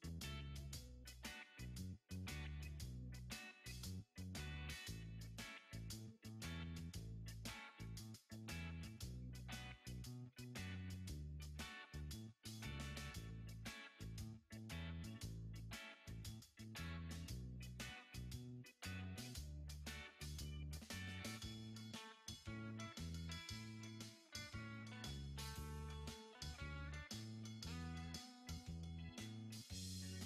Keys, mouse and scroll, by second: 3.0-3.8 scroll down 10, 4.2 click, 5.1 click, 6.4 click, 7.5-9.2 drag, 9.2 t, 11.9 scroll down 1, 12.7 click, 14.7 click, 15.9 scroll down 1, 16.8 click, 17.4 KP_7, 18.1 scroll down 4, 18.8-19.7 scroll up 4, 20.0 click, 20.8 shift+a, 23.3 scroll down 7, 24.2 click, 25.3 click, 26.0 scroll up 8, 26.7 s, 28.7-29.9 drag, 29.9-30.2 scroll up 4.